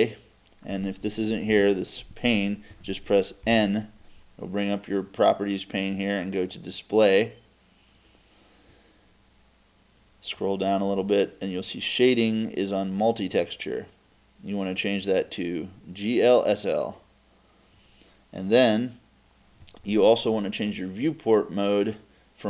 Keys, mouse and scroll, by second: 1.5 n, 3.5 n.